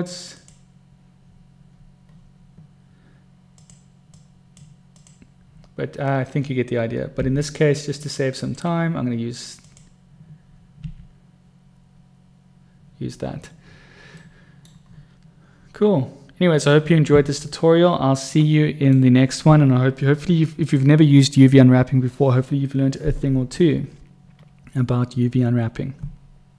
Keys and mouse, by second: 4.4-4.9 drag, 7.3 u, 11.2 u, 14.6 middle click, 17.8-19.5 middle drag.